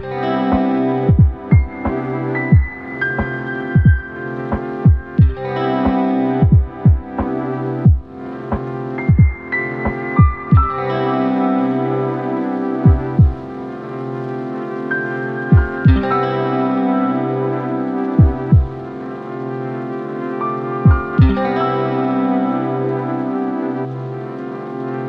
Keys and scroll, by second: 15.7 ctrl+t, 20.2 ctrl+j, 20.6 ctrl+t, 24.9 ctrl+e.